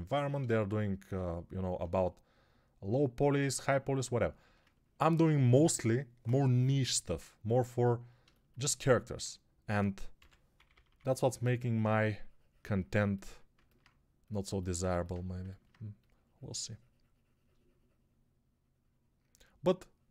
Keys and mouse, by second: 10.0-10.9 typing.